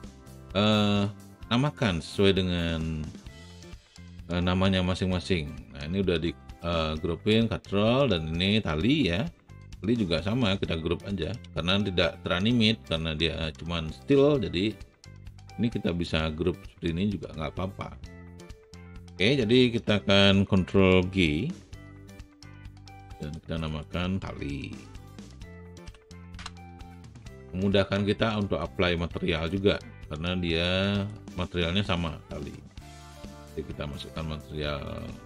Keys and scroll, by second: 22.0 ctrl+g, 25.1-26.3 typing, 27.4-28.1 typing.